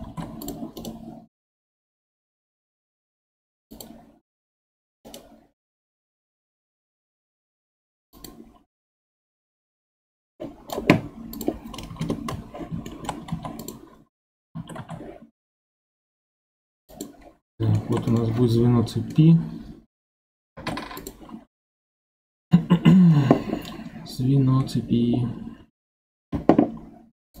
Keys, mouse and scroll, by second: 0.1 ctrl+Tab, 0.8 right click, 5.0 right click, 9.4-11.3 middle drag, 11.3-12.9 drag, 12.9-13.3 shift+middle drag, 13.3 ctrl+Tab, 14.5 a, 14.8 s, 17.2-18.2 scroll up 8, 17.8 shift+middle click, 18.7-19.1 scroll down 1, 19.1-20.5 middle drag, 20.5 ctrl+Tab, 21.4 scroll up 3, 21.9-25.0 middle drag.